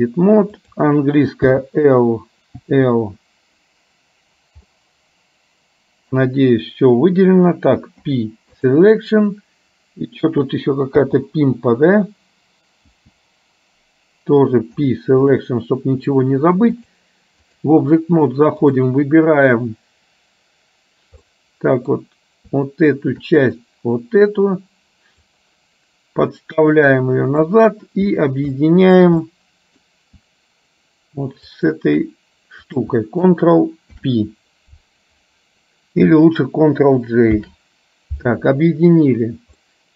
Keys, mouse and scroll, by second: 2.9 l, 4.9-6.3 middle drag, 8.1 p, 13.0 l, 14.9 p, 17.1 click, 21.4 middle click, 23.5 click, 25.5-27.6 drag, 28.6 shift+middle click, 29.4-29.9 scroll up 1, 31.5 shift+click, 33.9 ctrl+p, 37.5 ctrl+j, 39.8 middle click.